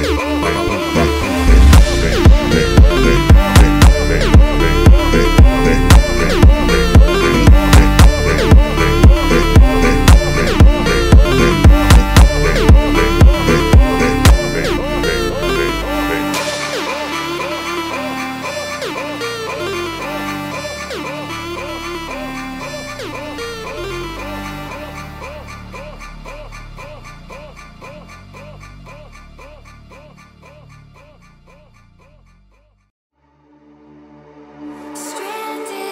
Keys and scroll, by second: 3.3-4.8 typing, 7.3 space, 7.5 h, 7.9 r, 8.0 e, 27.6 space, 27.9 n, 28.2 m.